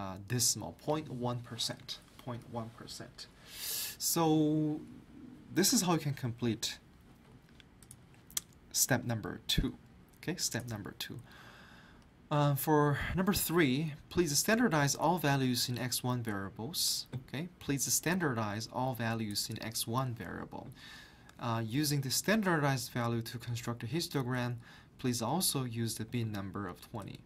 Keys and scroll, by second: 5.7 alt+Tab.